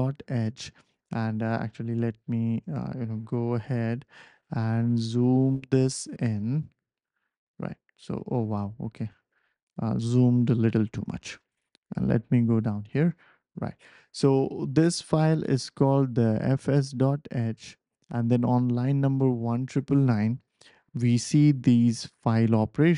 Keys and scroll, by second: 1.9 BackSpace, 6.2 super+=, 6.4 super+=, 6.5 super+=, 9.1 super+-, 14.7 ctrl+alt+super+p.